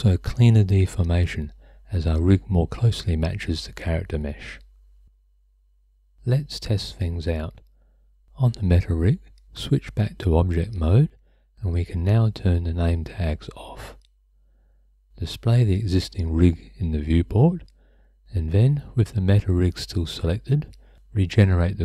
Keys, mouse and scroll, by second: 0.6 click, 3.3 click, 5.1 Tab, 9.1 click, 11.8 click, 14.0 click, 17.1 click.